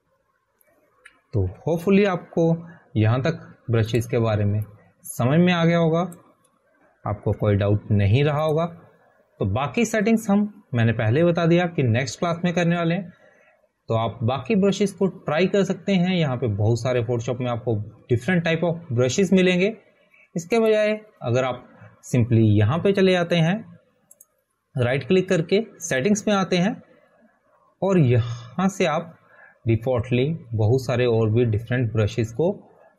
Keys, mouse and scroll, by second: 1.7-3.2 typing, 5.4 ctrl+a, 6.0 Delete, 8.6 click, 11.8 ctrl+d, 13.1 click, 18.9-22.4 scroll down 1, 22.4 scroll up 1, 25.1 click, 25.1-27.3 scroll up 1, 28.8 right click, 30.5 click.